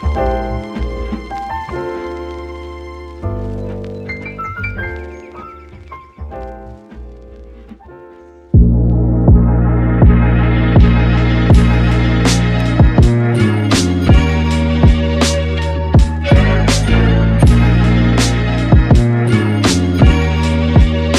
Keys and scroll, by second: 4.4 super+-, 12.3-13.5 typing, 18.5-19.5 typing.